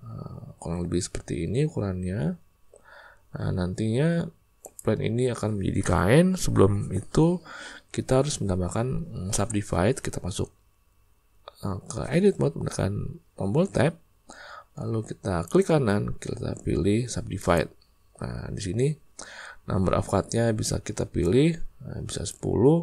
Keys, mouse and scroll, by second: 13.7 Tab, 15.5 click, 21.2-22.3 drag.